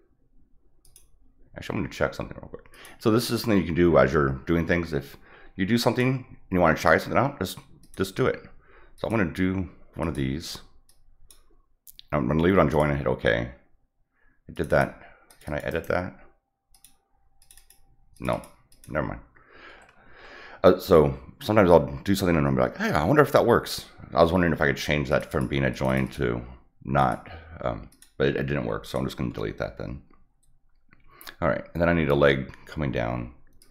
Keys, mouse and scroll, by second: 0.8 click, 2.7 click, 5.7 click, 7.8 click, 8.9 click, 10.0 click, 10.8 click, 12.7 click, 14.5 click, 14.7 click, 15.3 click, 15.4 click, 15.7 right click, 16.7 click, 17.4 click, 17.5 click, 18.1 click, 18.3 click, 18.7 click, 25.1 click, 25.3 click, 25.7 click, 26.0 click, 27.0 click, 27.9 click, 28.8 click, 33.6 click.